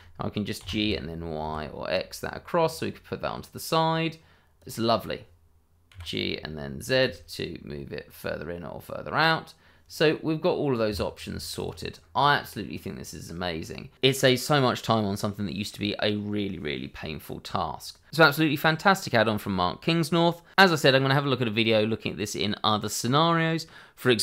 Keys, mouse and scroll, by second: 0.5 g, 0.8 y, 1.4 x, 4.5 click, 5.9 g, 7.0 z, 10.8 Escape, 11.5 click, 11.8 scroll down 1, 12.1 middle click, 13.5-13.9 scroll up 1, 18.1 click, 18.2 middle click, 19.6-20.2 scroll up 1, 22.8 shift+middle click.